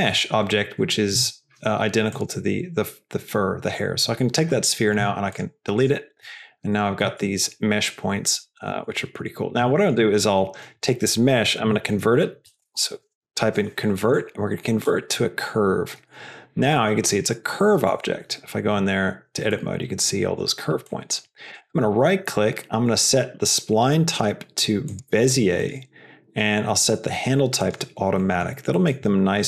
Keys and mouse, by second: 0.2 g, 2.1 click, 5.0 x, 5.7 click, 6.2 Tab, 7.0 Tab, 8.3 Tab, 8.6 Tab, 9.7 shift+middle click, 11.6 F3, 17.8 Tab, 19.4 middle click, 20.8 middle click, 21.5-24.9 right drag, 25.7-27.7 right drag, 28.1 middle click, 28.7 middle click.